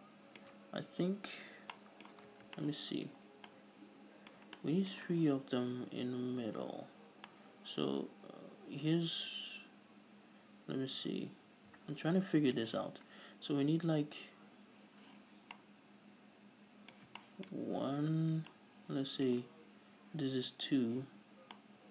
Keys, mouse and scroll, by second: 2.4-2.7 scroll down 2, 17.4-21.9 shift+middle drag, 17.8-18.6 scroll up 2, 21.2-21.8 scroll down 2.